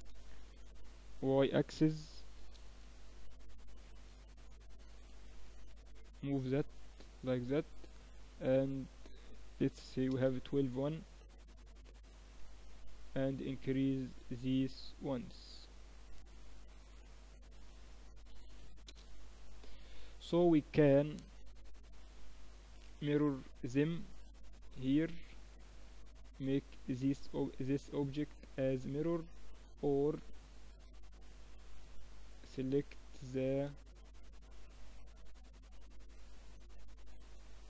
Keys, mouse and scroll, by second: 2.0 click, 4.4-6.3 drag, 8.6-10.2 drag, 10.2-16.8 middle drag, 16.8 click, 17.3-19.2 drag, 20.4-24.4 middle drag, 24.4-27.4 drag, 27.4-31.5 middle drag, 31.5-33.7 drag, 33.7 z, 34.0 middle click, 34.6-36.3 drag, 36.3 z, 37.3-37.6 middle drag.